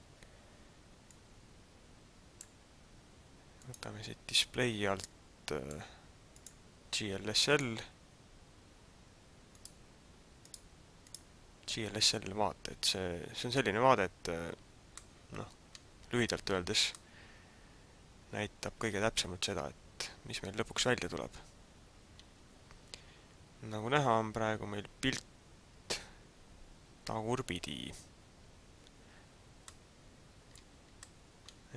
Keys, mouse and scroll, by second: 1.1 click, 3.6 click, 5.0 click, 6.3 click, 9.4 click, 10.4 click, 11.0 click, 14.9 middle click, 16.8 middle click, 29.7 middle click, 30.9 middle click.